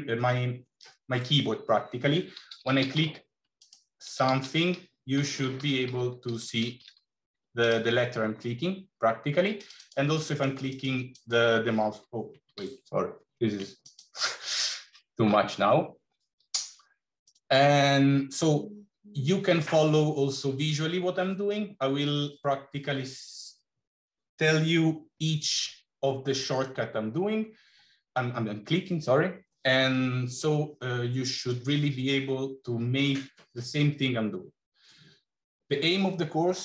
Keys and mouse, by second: 3.9 g, 4.1 g, 5.0 l, 9.4 click, 10.1 middle click, 10.6 right click, 13.1 ctrl+z, 13.7 click, 17.2 click.